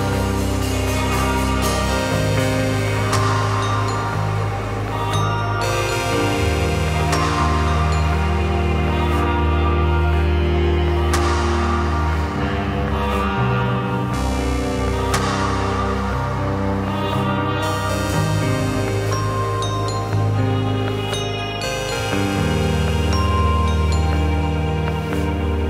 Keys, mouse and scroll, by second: 0.3 click, 0.4-1.6 middle drag, 1.6 click, 1.8 r, 2.2 click, 2.3-3.2 middle drag, 4.9 click, 5.6 alt+d, 10.6-11.5 middle drag, 11.9-13.2 middle drag, 13.6-14.6 middle drag, 15.3 `, 16.0 `, 16.3 `, 17.0 `, 18.5 r, 19.1 drag, 19.3-20.8 middle drag, 20.8 click, 21.9 s, 22.4 click, 22.5-24.6 middle drag.